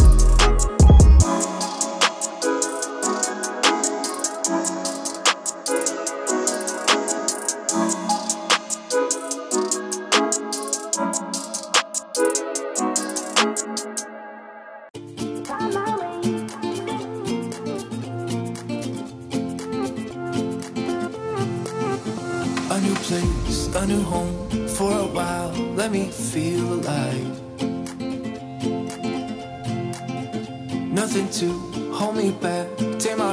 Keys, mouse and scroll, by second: 2.4-7.6 drag, 2.4 typing, 8.4 typing, 8.9 Return, 9.8 typing, 10.8-13.8 drag, 14.6-15.6 typing, 16.8 typing, 17.2-23.2 drag, 20.1-20.9 typing, 25.9-27.3 typing, 28.4-32.1 drag.